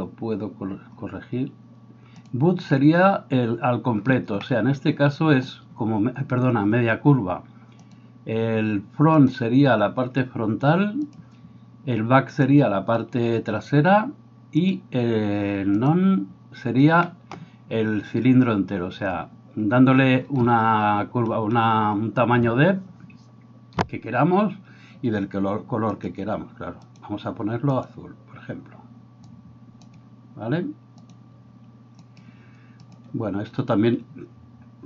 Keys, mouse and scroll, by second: 17.1-34.8 middle drag, 26.9-28.3 drag.